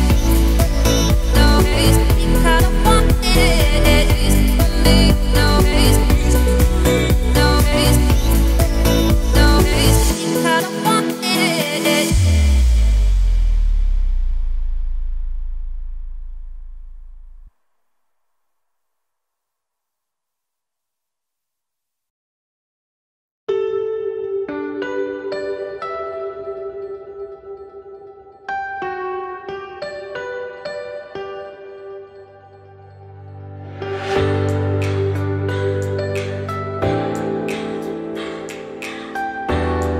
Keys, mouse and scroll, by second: 0.1 Tab, 0.6 a, 0.9-1.3 scroll up 1, 1.3 middle click, 1.9 click, 2.2-3.8 middle drag, 3.8 shift+click, 4.5-5.6 middle drag, 5.6 shift+click, 6.5 shift+click, 25.8 scroll down 1, 25.8 middle click, 26.5 scroll up 2, 26.8 middle click, 27.3 `, 27.8 z, 28.2 shift+middle click, 28.4-29.1 scroll up 4, 29.1 s, 32.0 ., 33.6 m, 36.4 click, 36.8-37.2 scroll down 2, 37.2 s, 39.8 ..